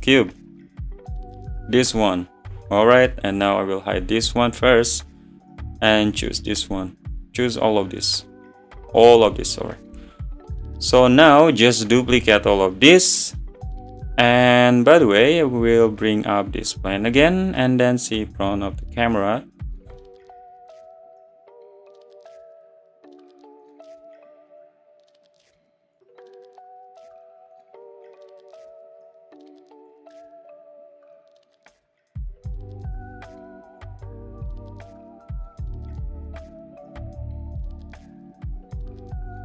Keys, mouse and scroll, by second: 0.5-2.5 drag, 2.5 n, 3.4 click, 4.0 h, 4.6-5.2 middle drag, 5.2 `, 5.9-12.9 drag, 12.9-16.0 middle drag, 16.0-17.5 drag, 18.3 click, 19.9 n, 21.4 `, 23.3 shift+d, 23.5 g, 24.7 click, 25.6 shift+d, 25.9 g, 27.6 click, 29.0-29.6 scroll down 2, 29.3 shift+d, 30.9 g, 32.4 click, 33.0 g, 34.1 scroll up 2, 34.6-35.0 scroll down 2, 35.0 shift+d, 35.5 g, 36.7 click, 37.5 shift+d, 38.0 g, 38.9 click.